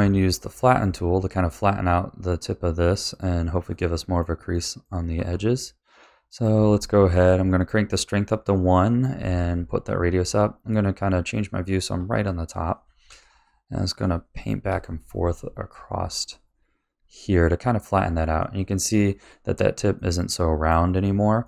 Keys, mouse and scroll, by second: 3.1 click, 3.7-5.1 middle drag, 10.8-12.0 middle drag, 12.0 click, 14.7 click, 18.4 middle click, 19.2 scroll down 2, 19.9-21.0 middle drag, 21.0-21.4 scroll up 3, 21.4 middle click.